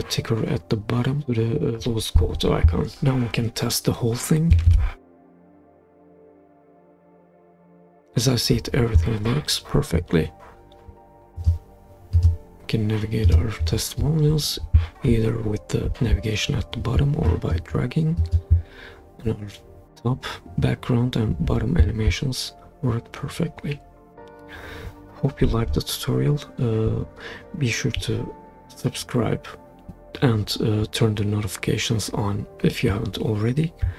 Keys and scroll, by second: 4.7 super+p.